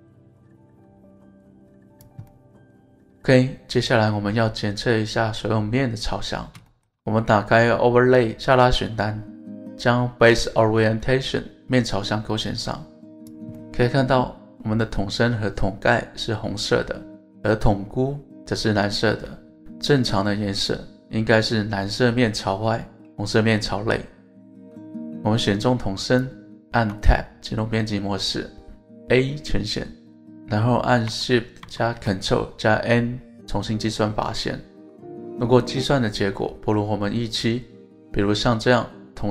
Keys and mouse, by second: 2.0 click, 2.3-5.1 middle drag, 6.7 shift+middle drag, 8.4-13.3 drag, 13.5-14.4 middle drag, 15.5-17.5 middle drag, 26.8 Tab, 29.0 a, 31.6 ctrl+shift+n.